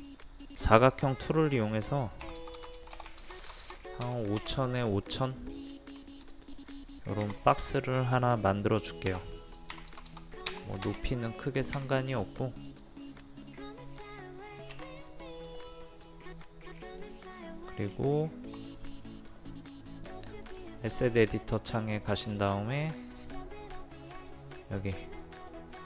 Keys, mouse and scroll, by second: 2.3 KP_5, 2.4 KP_0, 3.1 KP_5, 3.3 KP_0, 5.0 scroll down 1, 5.1 middle click, 5.6 scroll up 1, 5.8 shift+middle click, 6.5 click, 9.1 KP_2, 9.8 KP_7, 9.9 KP_0, 11.4 middle click, 12.0-14.4 drag, 14.4 middle click, 14.9 click, 15.6-16.7 right drag, 16.9 click, 17.3 middle click, 18.7 middle click, 20.0-23.7 drag.